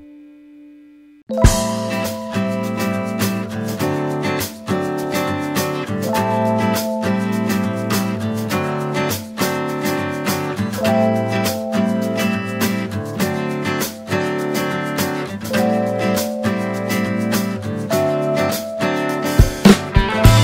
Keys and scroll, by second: 4.6 space.